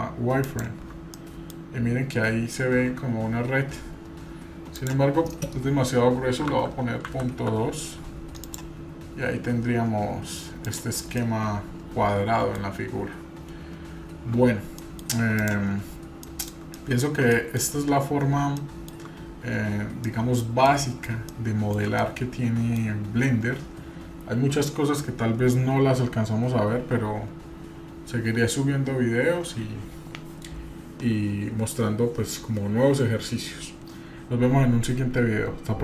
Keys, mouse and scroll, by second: 1.2-1.5 middle drag, 2.0 scroll up 1, 5.0-7.5 drag, 8.4 click, 10.7 click, 11.2-12.6 middle drag, 11.2 scroll down 2, 14.9 middle click, 14.9 scroll down 1, 15.4 click, 15.9-16.2 scroll down 2, 16.4 middle click, 16.8-17.2 shift+middle drag, 17.3 middle click, 17.7-18.6 scroll up 1, 18.6 shift+middle click, 20.0 middle click, 20.6 middle click, 21.3-21.8 shift+middle drag, 21.3 shift+scroll down 1, 22.0 middle click.